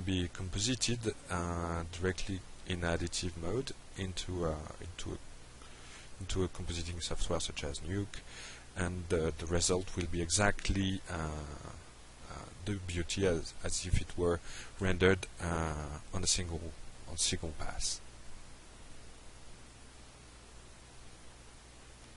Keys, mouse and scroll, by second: 21.7 click.